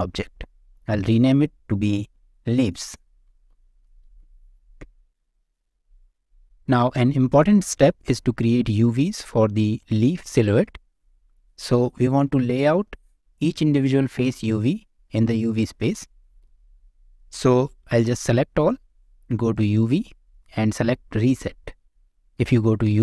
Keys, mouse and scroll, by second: 0.9 F2, 5.9 click, 7.5-8.0 middle drag, 8.9 shift+middle click, 10.2-11.1 middle drag, 12.0 click, 12.4 Tab, 12.8 shift+middle click, 13.3-13.7 scroll up 1, 18.3 a, 19.5-21.3 drag.